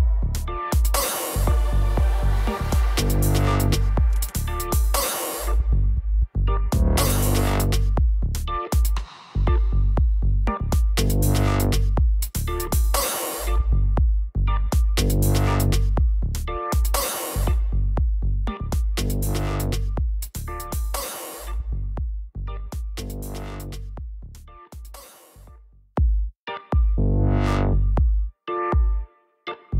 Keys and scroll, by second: 6.3-9.0 typing, 9.3 Return, 25.9-27.7 typing, 28.0 ctrl+Return.